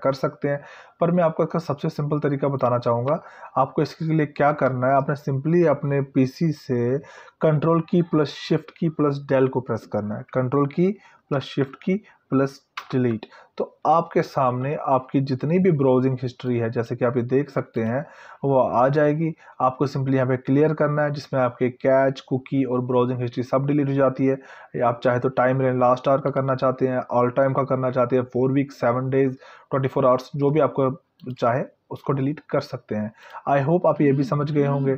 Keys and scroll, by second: 12.7 ctrl+shift+Delete.